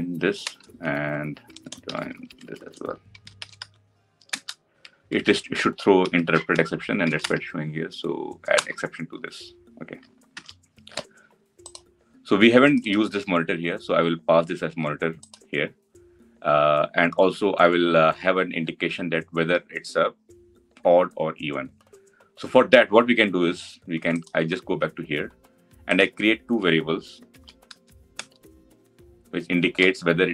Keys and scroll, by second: 0.2 Return, 6.9 Return, 10.1 alt+Return, 12.7 ctrl+alt+l, 24.0 ctrl+b, 27.1 ctrl+b, 28.7 ctrl+alt+l.